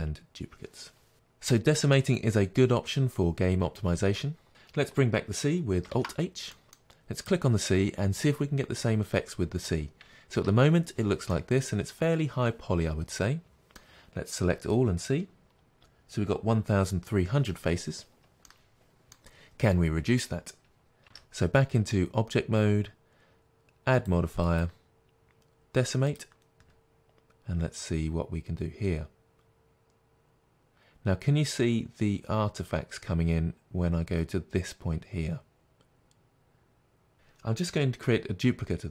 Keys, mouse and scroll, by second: 5.9 alt+h, 5.9 right click, 6.5 middle click, 7.2 click, 10.3 Tab, 11.4-14.2 middle drag, 14.4 a, 18.4 middle click, 21.0 Tab, 23.1-26.1 middle drag, 26.1-38.9 drag.